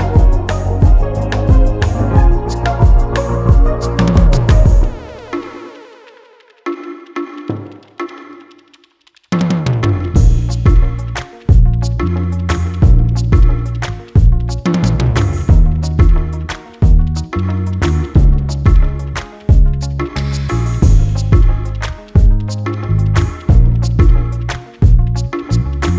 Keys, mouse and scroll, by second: 0.7-1.9 scroll up 1, 6.4 click, 8.9 click, 10.5 click, 12.5 click, 16.8 click, 20.6 click, 23.9 click.